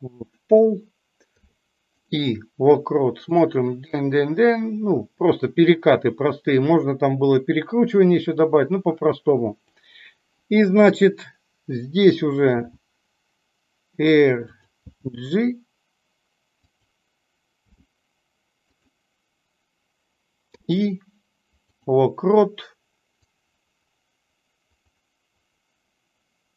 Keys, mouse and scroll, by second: 3.4-9.7 drag, 23.3-26.5 drag.